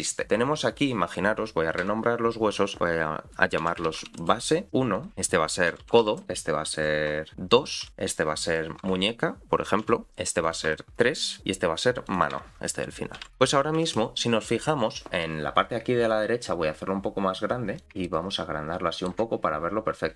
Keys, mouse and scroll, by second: 0.2 click, 1.8 F2, 5.1 click, 6.7 click, 7.3 F2, 8.4 click, 8.8 F2, 10.4 click, 10.7 F2, 12.0 click, 12.3 F2, 17.8 click, 18.0-19.2 ctrl+middle drag, 19.5 scroll down 3.